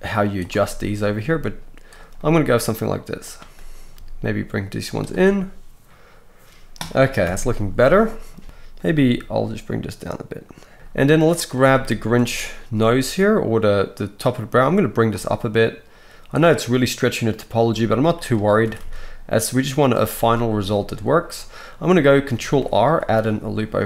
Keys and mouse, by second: 1.2-17.5 drag, 1.2 g, 3.2 middle click, 3.2 right click, 3.9 g, 7.2 KP_1, 8.9 g, 13.0 g, 15.1 g, 17.5 middle click, 17.5-22.6 right drag, 17.6 g, 18.6 r, 22.4 ctrl+r, 22.6-23.7 drag, 23.7-23.8 right drag.